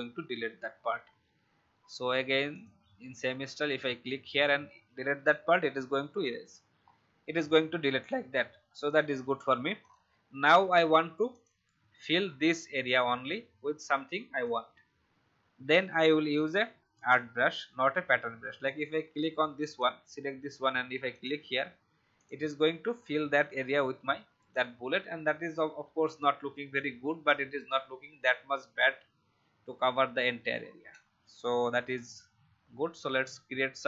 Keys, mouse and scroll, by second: 2.5 click, 4.3 Delete, 6.1 v, 6.7 alt+scroll down 1, 7.3 click, 31.0 ctrl+z, 31.9 click.